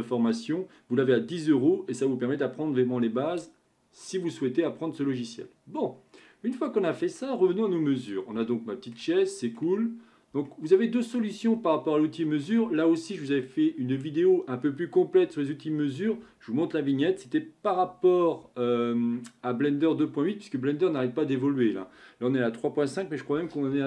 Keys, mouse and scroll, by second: 4.6-7.6 middle drag, 7.6-8.0 scroll up 3, 8.0 click, 8.4-9.8 shift+middle drag, 9.8-10.5 scroll up 3, 10.5-11.5 shift+middle drag, 11.5-12.3 scroll down 1, 12.3-15.9 middle drag.